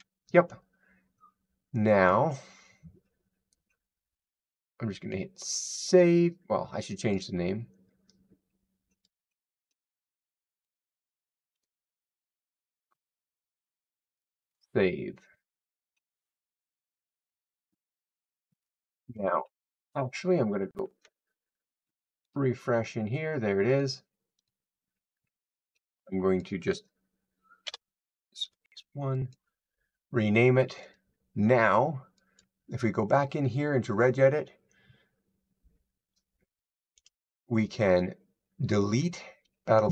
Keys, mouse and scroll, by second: 1.9 click, 4.1-4.5 scroll down 8, 5.1-5.9 scroll, 7.0 click, 10.5 click, 11.4 2, 14.3 click, 18.5 click, 20.1-20.4 scroll, 21.2-22.1 scroll down 2, 22.2 click, 22.2 scroll, 23.7 click, 24.3 click, 26.3 click, 28.3 1, 29.2 click, 32.0-34.2 drag.